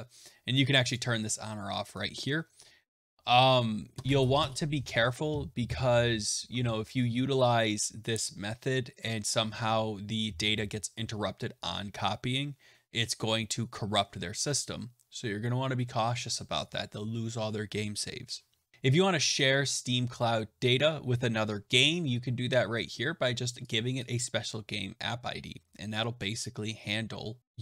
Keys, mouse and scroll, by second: 0.8 click, 18.7-20.7 scroll, 23.9 click.